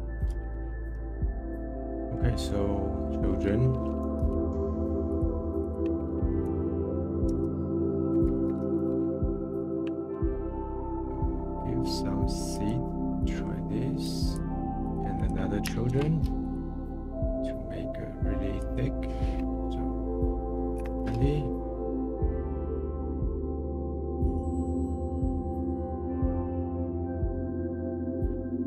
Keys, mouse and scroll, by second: 1.9-3.0 middle drag, 3.0 shift+a, 5.6-7.4 drag, 7.4 p, 8.2 BackSpace, 8.6 o, 10.4-10.9 scroll down 2, 10.9-12.5 middle drag, 12.5-14.1 drag, 14.9-15.9 drag, 15.9 shift+d, 17.0-17.7 middle drag, 17.7 scroll up 3, 18.6-21.8 drag, 21.8 middle click, 22.0 middle click, 22.2 scroll up 4, 22.2 middle click, 22.3 click, 22.8 middle click, 22.9 click, 23.1 middle click, 23.4 click, 23.9 click, 24.3 middle click, 24.5 click, 25.1 click, 25.7 click, 26.1 middle click, 26.5 click, 26.6 middle click, 26.8 click, 28.1-28.6 middle drag.